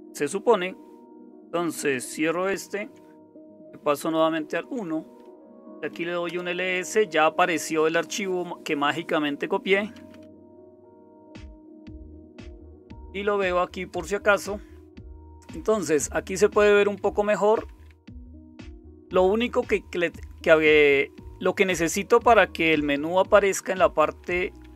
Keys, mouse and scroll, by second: 2.6 super+w, 4.3 super+1, 5.4-6.3 typing, 9.7-12.9 typing, 13.9 Return, 16.8 Down, 17.0 Down, 17.2 Down, 17.4 Down, 17.7 Down, 18.1 Down, 18.3 Down, 18.5 Down, 23.8 Down, 24.0 Down, 24.2 Down, 24.4 Down, 24.6 Down.